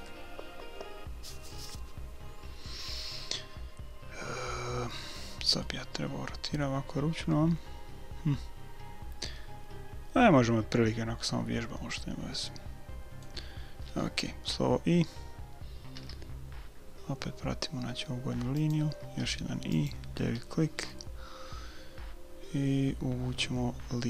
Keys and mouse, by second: 5.6-7.2 middle drag, 7.2 click, 16.0 i, 19.0 i, 20.9 middle click.